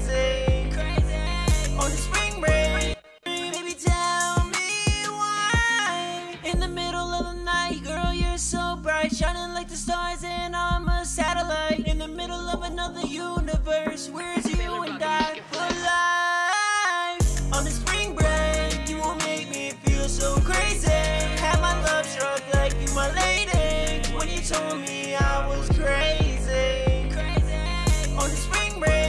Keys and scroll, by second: 0.0-0.1 typing, 4.9-7.5 typing, 10.1-11.4 typing, 13.9 typing, 14.2 Tab, 16.5-17.6 typing, 20.5-21.9 typing, 25.8-26.9 typing, 27.2 Tab, 27.6 Tab.